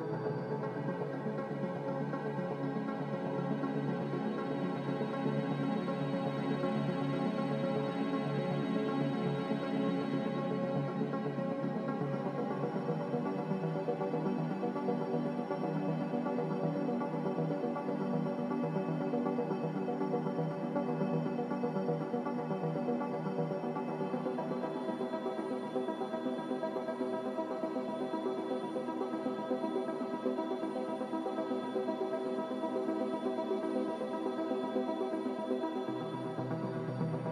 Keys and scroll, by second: 22.6 Delete, 23.7 Delete, 35.3-36.3 typing.